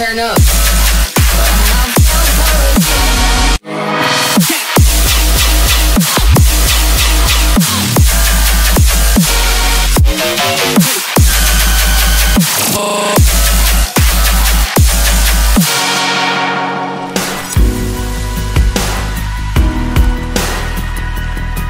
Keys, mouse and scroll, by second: 2.8-3.9 scroll down 4, 3.7 middle click, 5.5 middle click, 7.1 scroll, 7.8 shift+middle click, 8.8 scroll up 1, 9.5 middle click, 9.6 scroll up 1, 13.8 scroll down 1, 14.2 middle click.